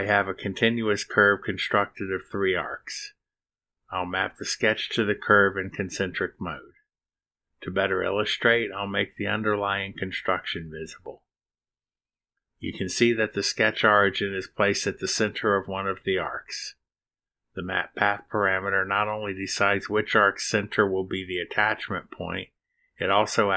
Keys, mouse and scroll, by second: 4.1-4.6 scroll up 4, 6.1 click, 6.6 click, 8.0 click, 9.8 click, 11.8 click, 13.1 space.